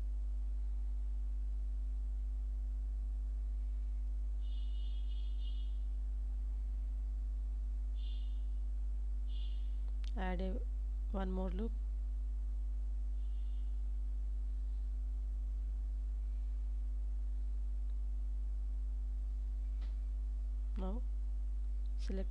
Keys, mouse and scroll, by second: 0.7 Tab, 1.3 ctrl+s, 2.3 middle click, 4.6 Tab, 6.8 ctrl+r, 11.5 shift+click, 12.4 middle click, 13.3 Tab, 14.0-15.3 middle drag, 15.5 Tab, 16.5 1, 17.3 click, 17.7 middle click, 18.4 g, 18.7 z.